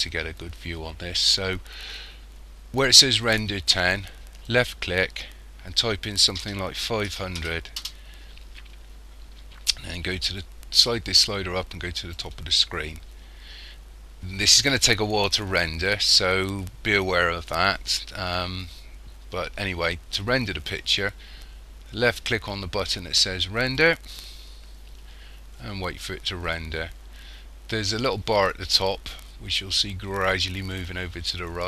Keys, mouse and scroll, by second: 5.8 click, 7.4 0, 10.8 click, 23.7 click.